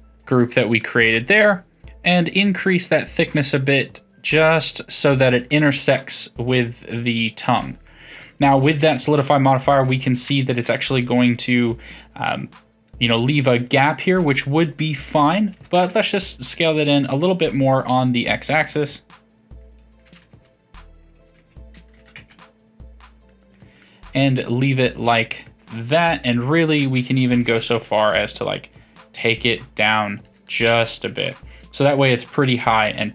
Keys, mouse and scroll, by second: 2.3-5.2 drag, 5.5-8.8 middle drag, 8.8 1, 9.5 drag, 9.8-10.4 middle drag, 10.4 shift+click, 10.7-13.7 middle drag, 14.0-15.5 middle drag, 15.5 s, 17.2-20.0 middle drag, 20.0 g, 22.0 s, 23.8-26.3 middle drag, 26.3 KP_3, 28.0 g, 30.4-33.1 middle drag.